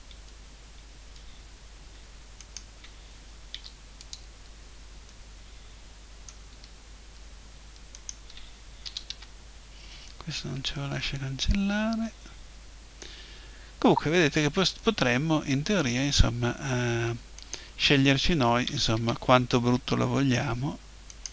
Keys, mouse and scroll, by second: 2.4-3.5 right drag, 3.5 Delete, 3.5 click, 5.1 click, 7.1 middle click, 7.9 right click, 8.9 Delete, 8.9 click, 9.7 middle click, 11.7-14.9 middle drag, 14.9-17.4 drag, 17.4-19.1 right drag, 18.7 Delete, 19.1 middle click, 21.1-21.3 drag.